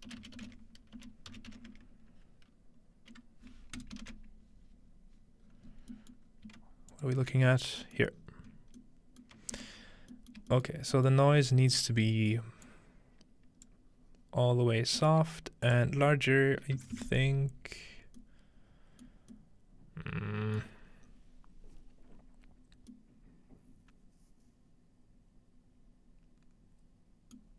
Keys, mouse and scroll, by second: 0.0-2.2 typing, 3.8 right click, 4.8 scroll down 2, 5.3 scroll up 2, 5.5-5.9 scroll down 3, 6.2-7.4 middle drag, 6.3 scroll down 1, 6.9 alt+shift+click, 8.0 alt+shift+middle click, 8.2-9.0 scroll up 1, 9.3 alt+middle click, 9.7-10.1 alt+middle drag, 10.4 shift+middle click, 10.8 alt+shift+middle click, 11.1 alt+shift+middle click, 11.4-12.5 scroll up 1, 11.8-13.0 shift+middle drag, 12.5-13.0 scroll up 1, 12.7-15.3 drag, 15.7-16.8 drag, 16.7-17.5 typing, 18.2 middle click, 18.5 scroll up 2, 19.2 scroll up 1, 20.8-22.5 middle drag, 22.5-22.9 scroll down 2.